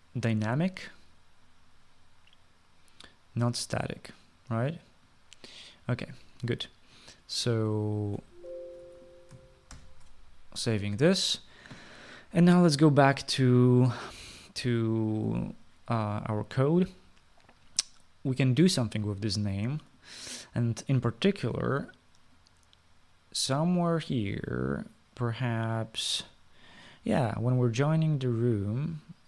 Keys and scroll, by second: 9.1 ctrl+s.